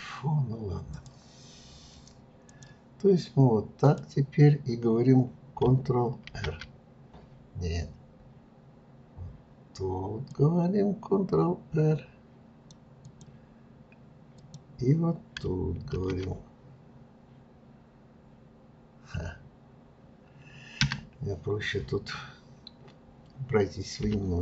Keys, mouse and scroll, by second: 0.9 click, 2.5-3.9 drag, 6.3 ctrl+r, 13.0 click, 14.4 click, 15.9 ctrl+r.